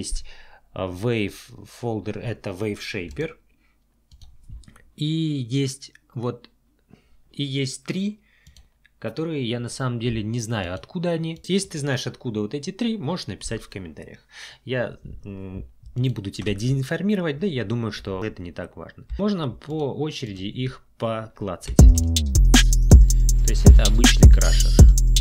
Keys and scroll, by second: 19.1 space, 21.7 space.